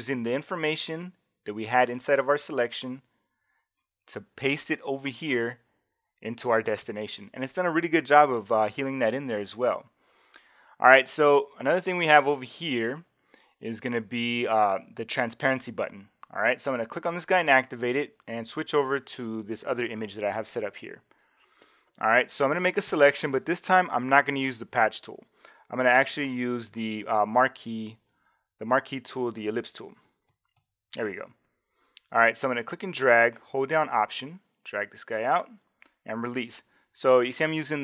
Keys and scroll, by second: 30.3 shift+m.